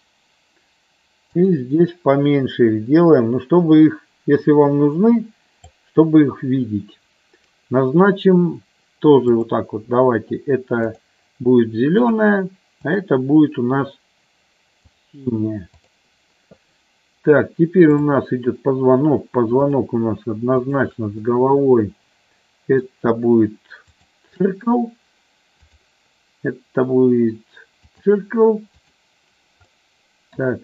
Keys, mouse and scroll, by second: 1.3-6.3 drag, 12.0 click, 12.7 click, 14.8 click, 15.7 click, 17.9 click, 19.6-21.6 shift+drag, 21.6-22.9 middle drag, 25.7-28.1 drag, 28.7 click, 29.7 middle click.